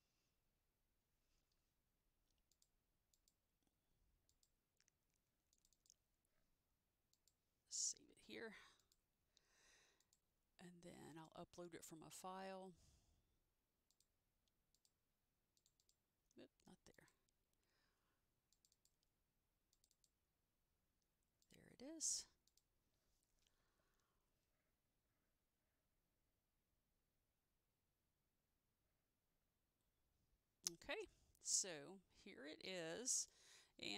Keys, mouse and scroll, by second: 2.6 click, 4.4 click, 5.9 click, 5.9 double click, 7.3 click, 8.9 click, 15.9 double click, 18.7 click, 18.9 double click, 19.9 click, 20.0 click, 20.6 double click, 22.6 click, 31.7 click, 31.8 click.